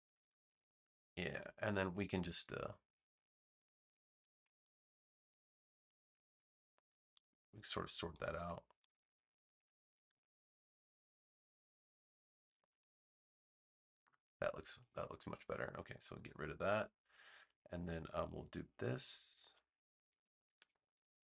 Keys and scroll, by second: 0.4 super+v, 16.1 BackSpace, 20.5 super+j.